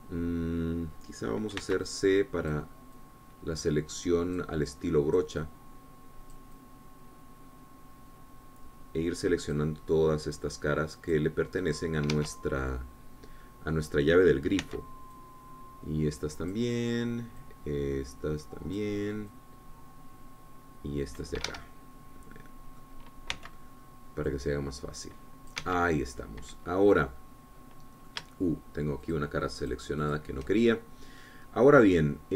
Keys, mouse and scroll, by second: 2.9 c, 3.2 click, 4.3-5.9 drag, 6.0 click, 6.7-7.8 drag, 7.9-11.1 drag, 12.3 click, 12.9 click, 13.5 Escape, 13.7-15.2 middle drag, 16.0 c, 16.5-18.1 drag, 18.7-20.3 drag, 20.7-22.7 drag, 22.8 Escape, 23.0-24.7 drag, 24.7 c, 25.6-27.1 drag, 26.9 Escape, 27.2 scroll down 1, 27.5 click, 27.6-30.4 middle drag, 30.4-31.8 shift+drag, 32.0-32.3 shift+middle drag.